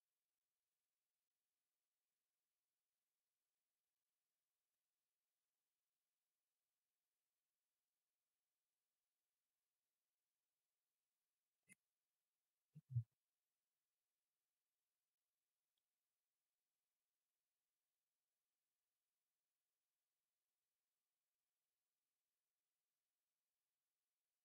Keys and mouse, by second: 1.1-4.5 drag, 14.8-15.6 middle drag, 16.7 KP_0, 20.4-24.3 drag.